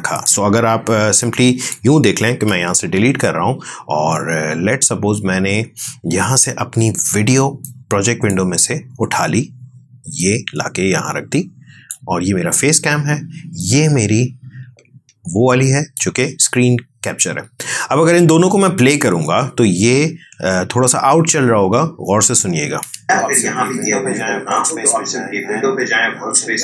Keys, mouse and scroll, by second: 2.2 Delete, 7.5-18.3 drag, 22.7 space, 25.0 click.